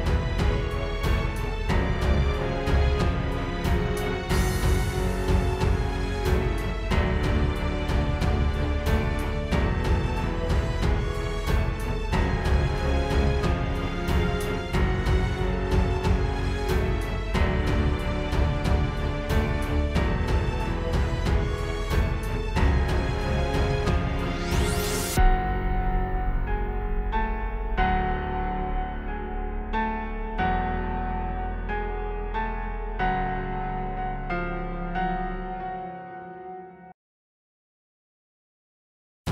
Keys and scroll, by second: 6.2 space, 7.5-9.3 typing, 11.8 shift+super+i, 12.6 shift+super+i, 13.1 shift+super+i, 16.1-17.9 typing, 22.5 space, 23.6 space, 25.9 space, 26.2 space, 26.7 space, 27.1 space, 31.8 space, 33.7 space, 34.8 space, 36.8 space, 37.1 space, 37.7 space.